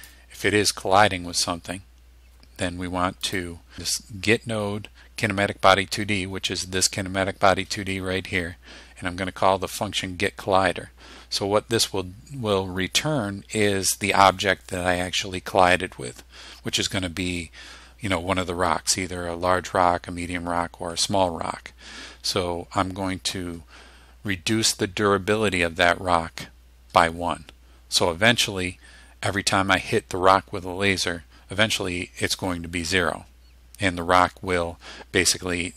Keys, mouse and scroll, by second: 3.3 click.